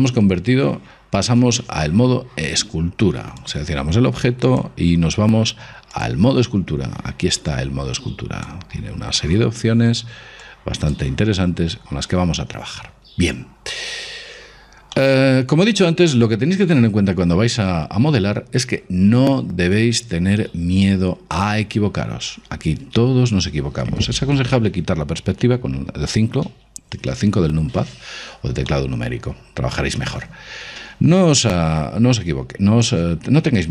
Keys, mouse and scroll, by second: 3.5-5.4 right drag, 4.6 click, 8.6-10.5 drag, 10.5 click, 12.7-16.8 middle drag, 26.6 KP_5, 28.8-30.5 middle drag, 31.7-33.7 middle drag.